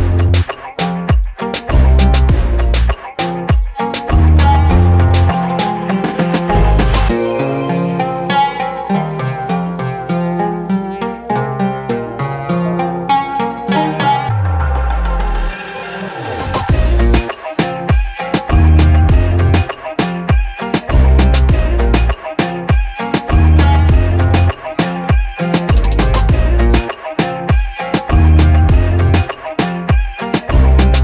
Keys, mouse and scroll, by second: 0.2 click, 1.3 right click, 3.2 click, 4.0 click, 4.9 click, 7.1 alt+click, 8.8 alt+click, 9.5 alt+click, 10.1 scroll up 1, 10.3 alt+click, 11.1 scroll down 1, 11.4 alt+click, 12.0 scroll up 1, 12.0 middle click, 12.3-13.4 alt+drag, 14.0 alt+click, 15.2-18.8 drag, 19.1 alt+click, 19.6 scroll down 2, 19.9 alt+click, 20.3 alt+middle click, 20.7 alt+click, 22.0-24.4 alt+drag, 24.8-28.0 alt+drag, 29.0-31.0 alt+drag.